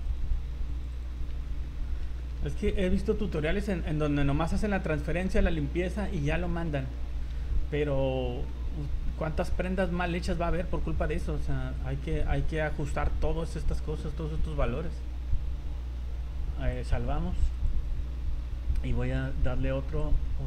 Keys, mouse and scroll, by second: 0.0 right click, 0.7 click, 0.9 click, 1.1-1.9 scroll down 6, 1.3 z, 1.7 middle click, 2.2 shift+middle click, 2.5 scroll up 1, 2.7 v, 3.5-4.0 scroll down 2, 4.5 middle click, 4.6 scroll down 1, 4.9 middle click, 6.9 shift+middle click, 7.4 z, 7.7 middle click, 9.0 scroll up 1, 9.5 shift+middle click, 9.8 middle click, 10.2 scroll up 2, 11.2-11.5 scroll down 4, 11.6 z, 12.0 middle click, 13.6 click, 16.7 click, 20.0 click.